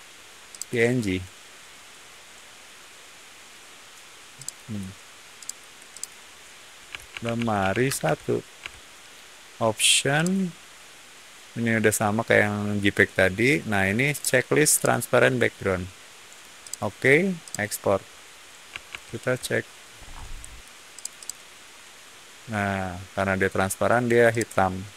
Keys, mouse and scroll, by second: 0.4 click, 4.3 click, 5.3 click, 5.9 click, 6.6-8.1 typing, 8.5 Tab, 10.1 click, 14.0 click, 14.6 click, 16.5 click, 17.3 click, 18.8 alt+Tab, 19.9 middle click, 20.8 click, 21.1 click, 24.2 click.